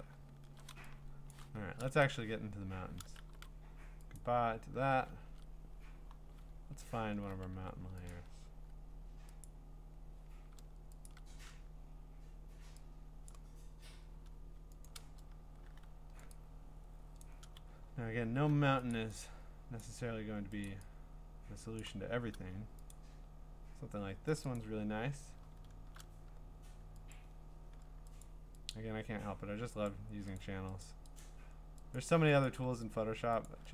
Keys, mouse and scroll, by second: 0.3 scroll, 1.3 click, 2.0 ctrl+Tab, 3.2 ctrl+w, 4.2 click, 5.3 ctrl+Tab, 6.2 scroll down 1, 6.4-7.5 scroll, 7.5 v, 8.1 ctrl+click, 9.4 click, 9.8 middle click, 9.8 middle click, 11.1 ctrl+click, 13.3 click, 13.6 scroll down 2, 14.9 ctrl+click, 16.2 click, 17.2 click, 17.6-18.1 ctrl+scroll up 5, 18.1-18.9 scroll, 18.9 ctrl+click, 19.8 click, 20.6 ctrl+click, 21.8 click, 22.9 click, 24.6 click, 25.5 scroll, 27.1 click, 28.2 click, 28.7 click, 29.9 click, 30.4 click, 30.8 click, 31.2 click, 31.9 click, 32.4 click, 33.5 click.